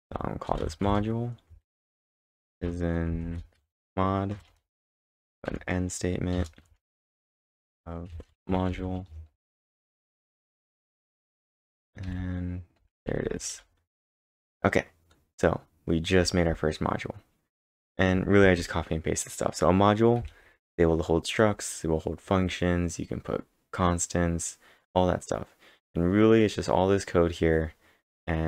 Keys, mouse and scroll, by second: 0.0-3.6 typing, 4.3 Return, 4.5 Return, 4.7-18.4 typing, 20.0-20.8 typing, 22.3 typing.